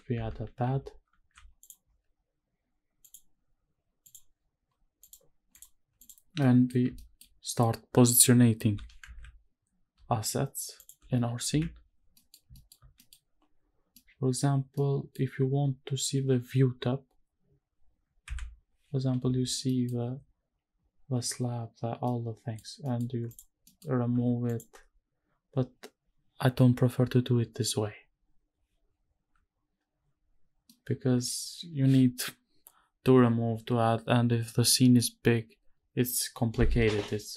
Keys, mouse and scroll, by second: 24.1 h, 24.4 click, 24.7 h, 30.7-31.3 middle drag.